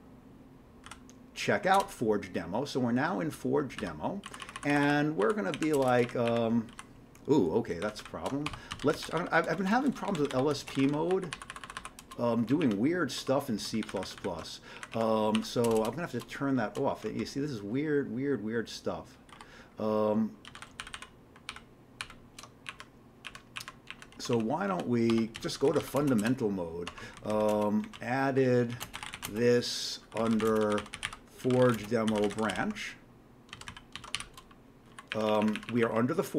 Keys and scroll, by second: 1.7 Return, 1.7 typing, 3.8 q, 4.2 Down, 4.4 Down, 4.5 Down, 4.7 Down, 4.8 Down, 5.2 Down, 5.5 Up, 5.7 Return, 5.9 Return, 6.0 Up, 6.2 Up, 6.7 Down, 7.8 ctrl+_, 7.9 ctrl+_, 8.4-14.2 typing, 11.5 Down, 11.6 Down, 12.0 Return, 14.7 Up, 14.9 Up, 15.3 End, 15.7 Return, 15.7 Return, 17.0 ctrl+l, 19.3 ctrl+y, 20.5 ctrl+x, 20.8 ctrl+_, 20.9 ctrl+_, 21.5 ctrl+_, 22.0 ctrl+_, 22.7 Up, 23.3 Up, 23.6 Up, 23.9 Up, 24.1 Right, 24.3 Right, 24.7 Up, 25.1-35.4 typing, 26.9 Tab, 35.4 Up, 35.5 Up.